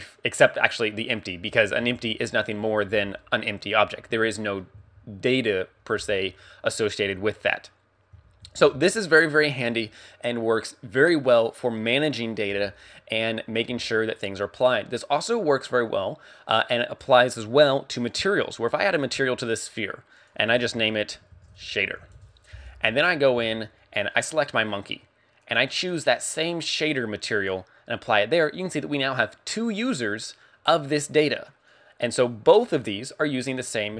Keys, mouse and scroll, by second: 0.6 click, 1.5 z, 1.9 g, 2.5 right click, 7.6 x, 8.1 z, 8.7 shift+a, 15.0 right click, 17.0 click, 18.1 click, 20.2 click, 24.2 right click, 25.4 click, 31.7 click, 32.8 right click, 33.2 right click.